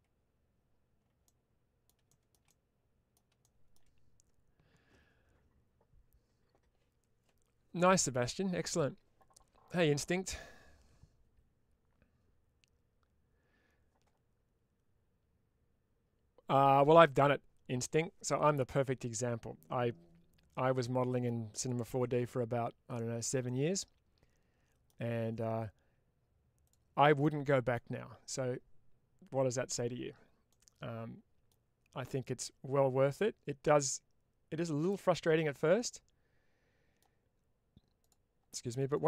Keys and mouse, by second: 1.1 middle click, 2.0 shift+middle click, 3.6 shift+middle click, 20.7 middle click, 21.8 2, 22.7 click, 23.3-24.7 middle drag, 27.1 middle click, 30.4 middle click, 32.1-34.8 drag, 35.0-36.8 middle drag, 38.8-39.0 drag.